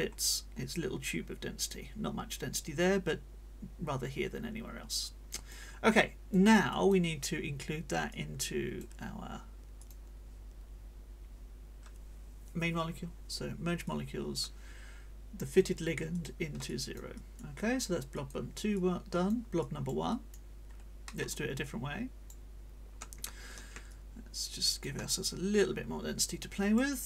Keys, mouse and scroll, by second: 0.1 scroll up 2, 0.7-5.7 drag, 5.9 click, 6.7 click, 8.1 click, 9.7 click, 13.9 click, 15.5 click, 16.1 click, 16.7 click, 18.1 click, 18.7 click, 19.6 click, 21.1 click, 21.6 click, 23.9-25.0 ctrl+shift+scroll up 3, 25.1-26.9 ctrl+drag.